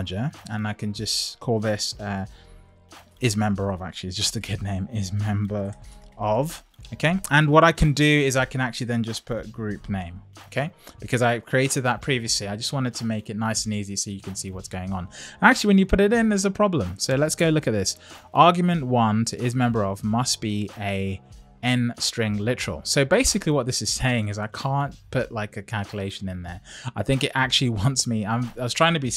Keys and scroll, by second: 2.1 shift+c, 4.1 shift+i.